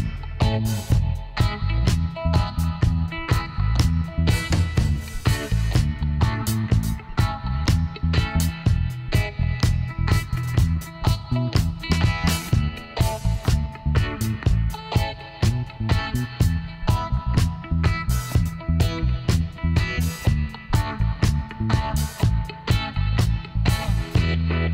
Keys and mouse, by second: 0.7 g, 4.7-7.8 right drag, 7.1 g, 9.2 g, 11.2-13.8 right drag, 12.9 g, 14.9 Tab, 15.2-17.3 middle drag, 16.7 z, 20.3 s, 20.9 middle click, 24.2-24.7 middle drag.